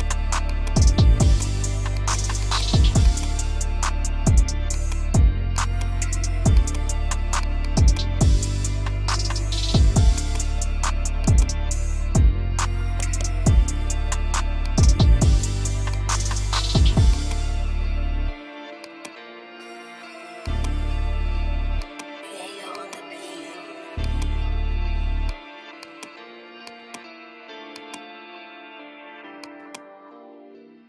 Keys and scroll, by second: 9.3 F3, 10.5 Delete, 15.5 Escape, 16.5 F2, 17.4 Escape, 22.0 ctrl+r, 28.0 F3, 29.5 ctrl+g.